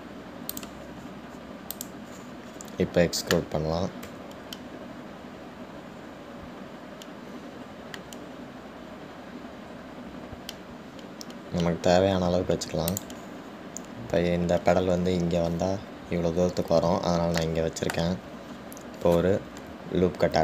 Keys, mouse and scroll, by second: 2.9 click, 3.1 middle click, 3.7-5.4 scroll down 4, 5.4 e, 18.6-19.9 shift+middle drag, 19.8 scroll up 2.